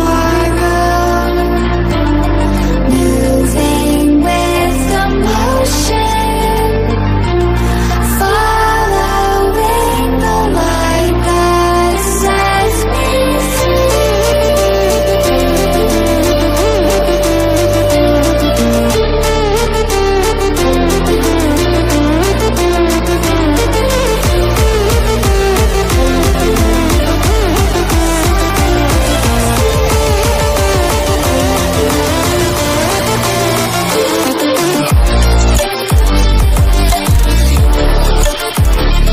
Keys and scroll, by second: 10.3 ctrl+-, 12.0 ctrl+z, 36.0 ctrl+j.